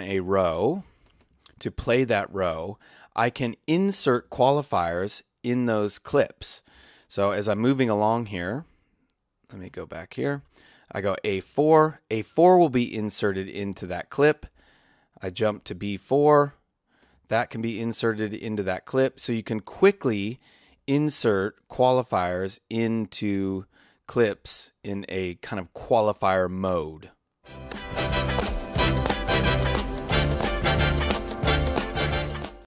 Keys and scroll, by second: 4.2 space, 6.7 space, 15.6 Tab, 18.3 Tab, 20.7 Tab, 24.8 Tab.